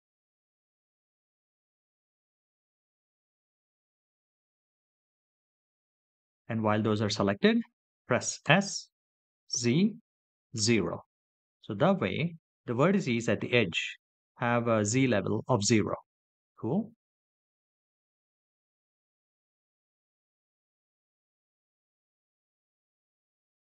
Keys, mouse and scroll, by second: 3.5 click, 6.0 click, 7.2 click, 8.3-9.8 middle drag, 10.6-11.3 scroll down 1, 12.1 s, 13.8 z, 15.2 KP_0, 16.8 Return, 17.6-18.2 scroll up 5, 18.9 shift+middle click, 19.6 middle click, 20.4 shift+middle click.